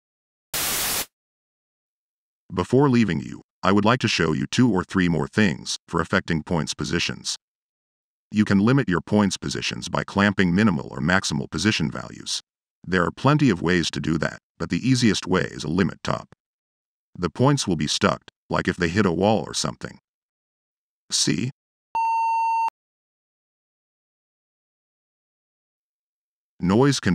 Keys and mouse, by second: 2.5-3.4 drag, 4.7 click, 6.8-10.4 middle drag, 11.1-12.4 middle drag, 12.7-16.8 middle drag, 21.3 middle click, 21.8 click, 23.3 click, 24.2 middle click, 24.7 click, 25.5 click, 26.2-27.1 drag.